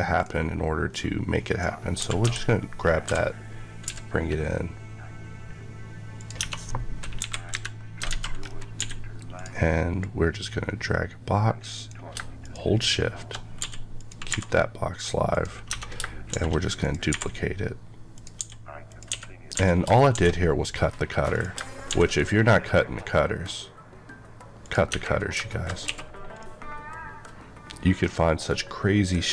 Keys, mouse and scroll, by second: 0.8 click, 1.9 typing, 3.7 typing, 6.1 click, 6.3 Tab, 7.1 KP_1, 7.9 KP_3, 8.0 alt+z, 8.3 scroll up 1, 8.7 d, 9.2 click, 9.9 click, 12.3 click, 13.9 click, 14.2 r, 15.2 click, 15.6 Tab, 16.2 d, 16.7 click, 17.0 r, 18.0 click, 18.3-20.0 typing, 18.9 click, 21.2 click, 21.8 d, 25.4 middle click, 25.7 scroll up 1, 26.3 middle click.